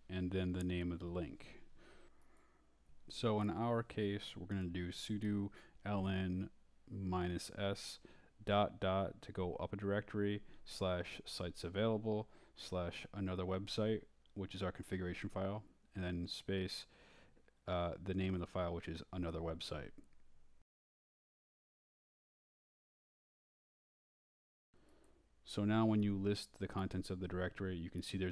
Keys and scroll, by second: 4.7 ., 5.0 /, 7.9-9.5 typing, 9.8 Tab, 14.3 a, 14.6 Tab, 18.1-23.3 typing, 24.1 Return, 24.5-25.8 typing.